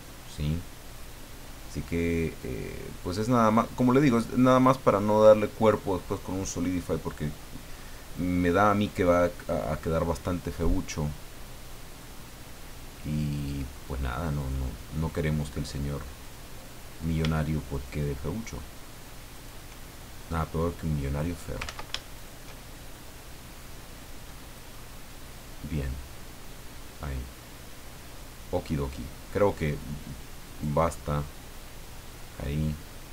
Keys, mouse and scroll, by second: 0.9-2.6 drag, 3.0-4.8 drag, 6.4-7.9 middle drag, 9.1-10.1 middle drag, 10.6-13.7 middle drag, 14.3 right click, 16.2 click, 17.7 shift+right click, 19.3 shift+right click, 20.2 click, 21.6 ctrl+z, 22.1 ctrl+shift+right click, 22.9-24.7 shift+drag, 24.8-28.8 middle drag, 30.4 right click, 31.6 click.